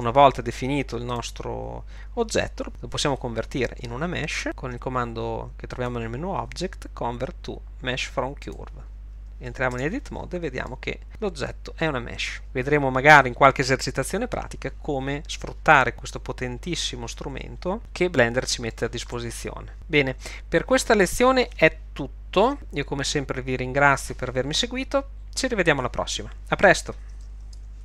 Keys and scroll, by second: 0.0 Tab, 9.8 Tab.